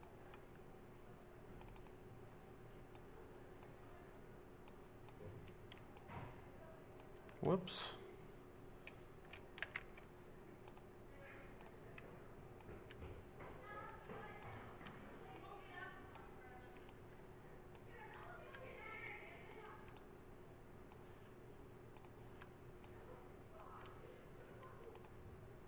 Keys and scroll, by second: 10.1 ctrl+z.